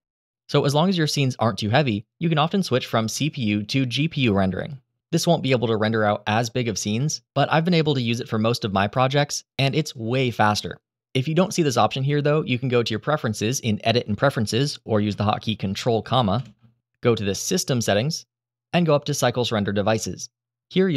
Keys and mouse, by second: 16.2 ctrl+,.